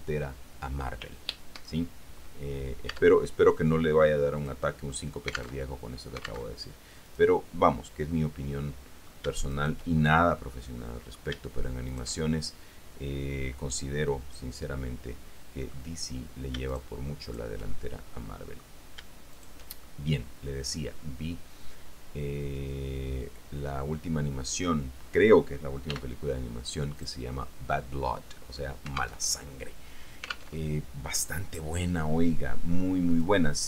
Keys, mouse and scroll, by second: 3.1 Tab, 4.6 click, 5.8 alt+Tab, 6.8 alt+Tab, 7.2 right click, 8.3-9.4 middle drag, 9.7 shift+right click, 10.3-11.5 shift+middle drag, 12.0 shift+middle click, 12.4-16.1 shift+middle drag, 16.8 shift+click, 17.4 shift+right click, 17.9-19.0 shift+middle drag, 19.5 shift+right click, 19.8-25.4 shift+middle drag, 26.1 x, 27.2 click, 29.4 alt+Tab, 30.8 alt+Tab, 33.3 click.